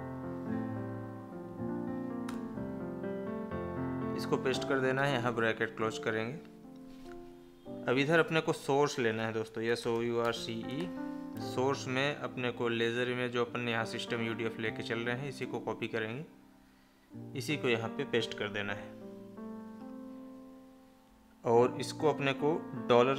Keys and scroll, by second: 15.3 ctrl+c, 17.3 ctrl+v.